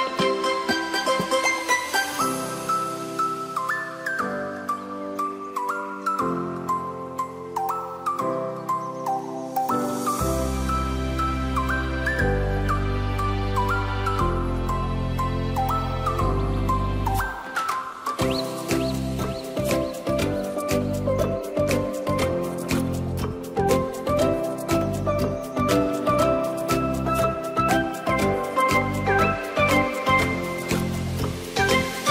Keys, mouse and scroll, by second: 0.0-3.4 drag, 3.9-6.6 drag, 7.9 click, 8.2-8.7 scroll up 2, 8.7 click, 10.5 click, 11.6-12.9 drag, 12.9-13.5 scroll down 1, 13.5-16.1 drag, 16.6-19.2 drag, 19.9-22.5 drag, 24.1 click, 24.7-26.4 scroll down 4, 26.4 click, 27.4-28.0 scroll up 2, 28.0-29.5 drag, 30.7-32.1 drag.